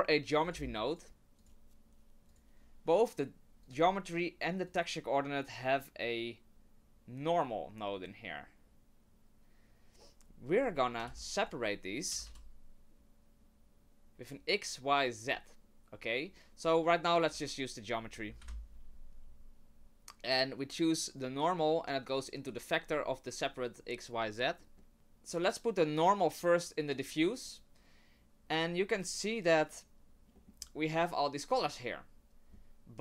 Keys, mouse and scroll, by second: 1.1 Delete, 1.1 shift+a, 3.6 click, 4.7 click, 10.5 click, 11.0 shift+a, 17.3 click, 18.4 Delete, 21.2 click, 24.8 middle click, 24.9 click, 25.4 click, 28.9 click, 29.2 click, 30.3 middle click, 30.5-31.1 scroll down 3, 31.1 middle click.